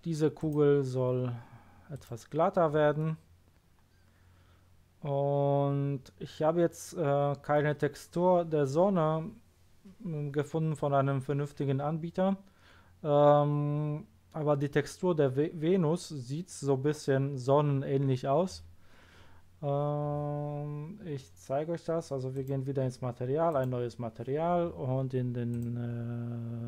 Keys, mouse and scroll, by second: 0.4 right click, 1.9 click, 3.0-4.5 middle drag, 20.9-22.3 scroll down 1, 22.3 click, 23.4 click, 25.5 click.